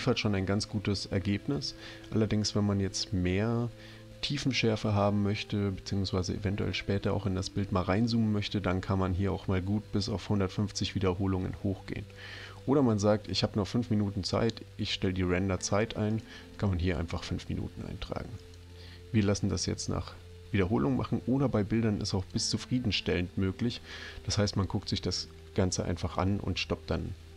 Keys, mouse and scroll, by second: 16.2 click, 18.4 click, 22.2 click.